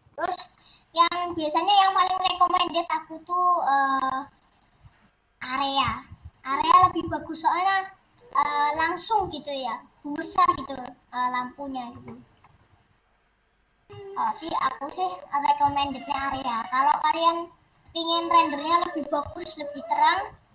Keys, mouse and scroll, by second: 0.0-0.3 scroll down 5, 0.3 middle click, 0.5-2.2 scroll up 7, 0.9 middle click, 2.2 middle click, 2.6-3.7 scroll down 1, 3.7-4.3 scroll down 1, 7.4 scroll down 3, 7.9 scroll up 4, 8.2-9.7 scroll down 5, 10.1-10.9 scroll up 8, 11.2 scroll down 2, 12.0 shift+middle click, 12.7 scroll up 1, 13.7-14.2 scroll down 1, 14.2 shift+middle click, 14.9 scroll up 1, 18.5-19.0 scroll down 7, 19.2-19.6 scroll up 2, 20.0 middle click, 20.2 scroll down 2.